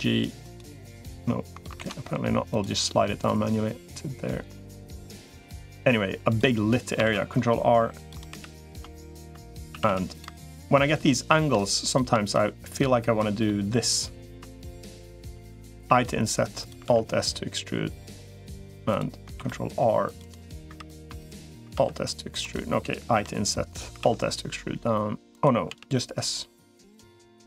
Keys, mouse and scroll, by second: 0.9 click, 1.7 ctrl+z, 2.3 click, 3.1-4.9 drag, 5.2 middle click, 6.1 click, 6.9 ctrl+r, 8.3 3, 9.5 a, 9.7 a, 9.9 click, 11.7 click, 12.5 click, 13.3 middle click, 15.7 i, 16.7 alt+s, 19.1 ctrl+r, 20.5 3, 21.5 alt+s, 22.9 i, 23.9 alt+s, 25.5 s.